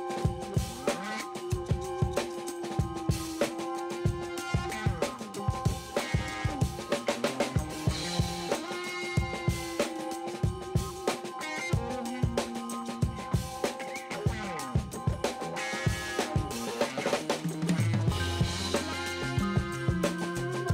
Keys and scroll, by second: 1.6 space, 3.6 ctrl+alt+z, 3.9 6, 7.8 space, 13.6 space, 18.3 space, 18.6 b, 19.3 ].